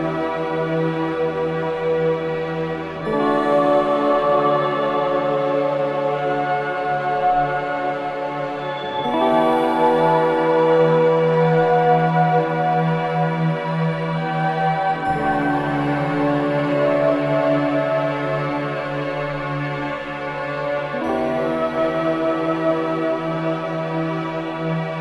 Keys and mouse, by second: 2.3 KP_1, 5.1-7.4 drag, 9.4-12.5 drag, 14.4 g, 14.9-16.5 drag, 18.8-21.5 drag, 19.2 z, 22.8 Tab, 23.3 click, 23.8 click.